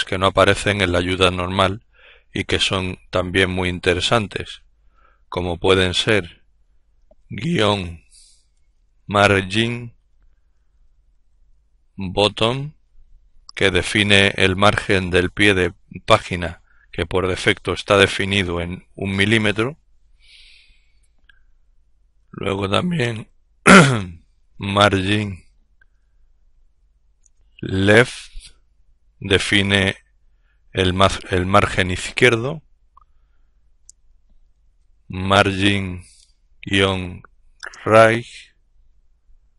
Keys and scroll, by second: 6.6-7.9 typing, 9.5-11.9 typing, 21.6-27.6 typing, 33.1-37.8 typing, 38.8-39.5 typing.